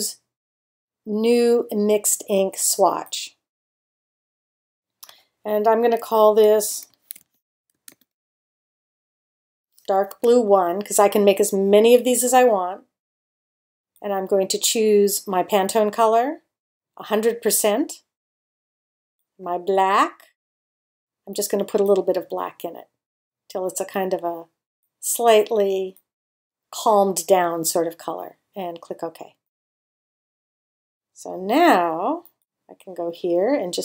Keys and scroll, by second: 6.4-10.1 typing.